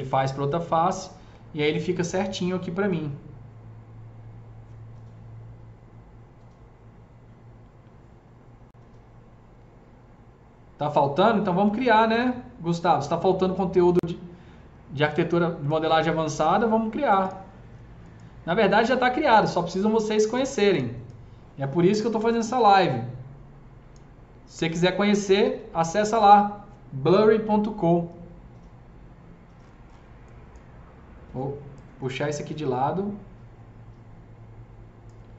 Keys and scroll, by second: 15.1 s, 25.3 ctrl+z.